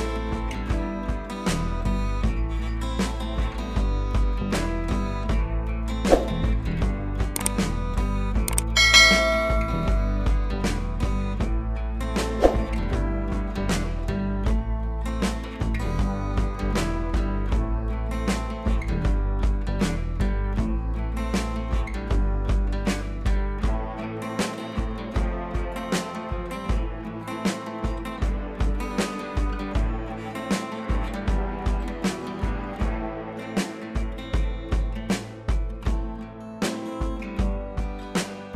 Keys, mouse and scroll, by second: 0.8 ctrl+a, 1.3 click, 2.5 ctrl+d, 3.1 Down, 3.9-5.2 drag, 11.4 ctrl+t, 11.8 right click, 12.8-14.1 click, 14.6-15.0 click, 16.1-17.8 drag, 18.1-19.5 scroll down 2, 19.5 scroll up 1, 19.7 ctrl+t, 19.9 right click, 20.3-21.7 click, 21.9 right click, 22.6-23.9 drag, 27.4 scroll up 1, 27.6-28.5 scroll down 1, 29.8-30.8 click, 31.0 ctrl+t, 31.0 right click, 31.6-32.8 drag, 36.3 scroll up 1, 37.4 click, 38.1 ctrl+l.